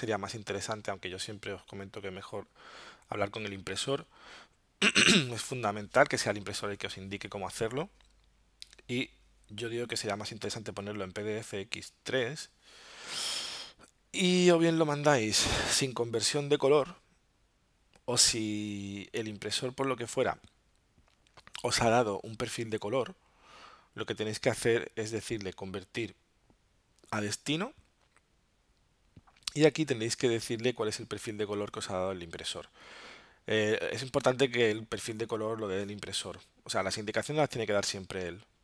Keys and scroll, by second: 0.7 alt+super+0, 8.8 alt+super+-.